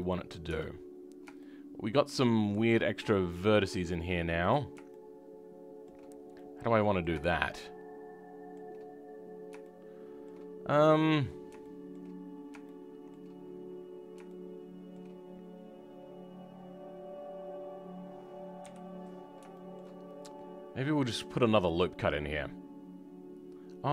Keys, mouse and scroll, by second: 0.4 Tab, 0.8-1.3 scroll up 1, 1.3-4.4 shift+middle drag, 4.4 click, 6.0-6.3 scroll up 1, 6.3-8.9 middle drag, 8.9-9.5 scroll up 1, 9.5-12.0 shift+middle drag, 12.0-12.6 scroll up 2, 12.6-13.8 shift+middle drag, 13.8-14.2 scroll down 2, 14.2-18.5 shift+middle drag, 18.5 KP_3, 19.1-19.4 scroll down 2, 19.4 shift+middle click, 19.9-21.5 scroll up 3, 21.5-23.9 drag.